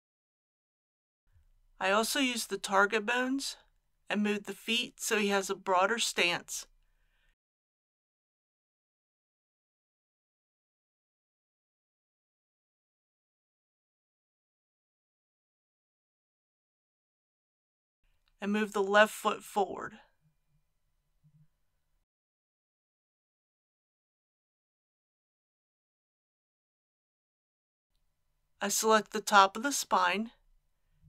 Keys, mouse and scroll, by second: 0.4-2.0 middle drag, 2.1 click, 3.1 KP_1, 4.2 g, 4.9 x, 8.2 click, 8.7-10.0 middle drag, 10.1 click, 11.0 KP_1, 11.5 g, 11.8 x, 16.3 click, 17.3-19.0 middle drag, 19.6 g, 19.8 y, 22.2 click, 22.8 KP_3, 27.3 middle click, 28.7 click, 30.7 shift+middle click.